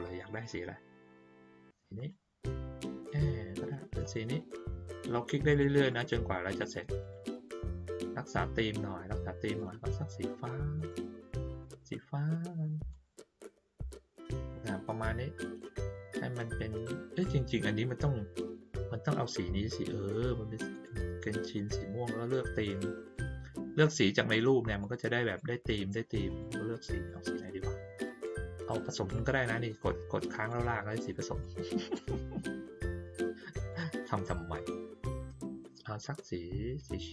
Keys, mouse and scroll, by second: 1.9 click, 4.0 click, 5.0 click, 5.5 click, 5.8 click, 6.5 click, 7.0 click, 7.8 click, 9.4 click, 10.7 click, 11.7 click, 12.9 click, 20.7 click, 21.5 click, 22.4 click, 23.1 click, 24.7 click, 25.2 click, 26.2 click, 26.9 click, 29.1-30.4 drag, 31.4 click, 33.0 click, 33.7 click, 34.5 click, 35.1 click, 36.0 click, 36.7 click.